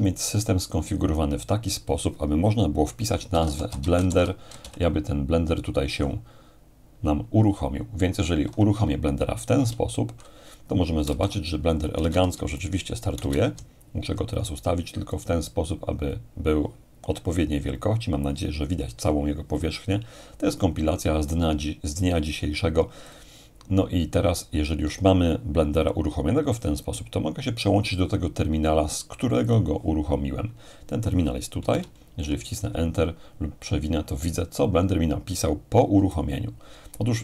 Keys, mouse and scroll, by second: 3.1-4.6 typing, 4.6 ctrl+l, 9.6 Return, 11.1 alt+space, 12.0 space, 12.6-14.0 alt+right drag, 15.1-17.1 alt+drag, 23.1-24.1 drag, 29.5-30.5 drag, 31.7 Return, 32.9-33.5 scroll up 2, 33.5-34.5 scroll down 2, 36.1-37.2 alt+right drag.